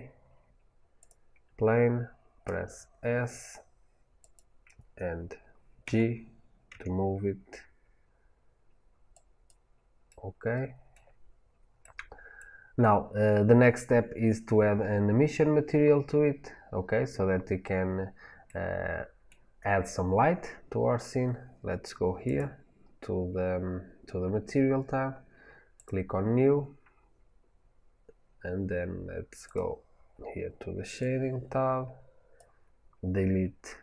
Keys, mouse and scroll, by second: 2.5 s, 4.2 click, 5.7 g, 9.3 click, 9.9-22.1 middle drag, 22.1 click, 25.7 click, 29.4 click, 30.9 click.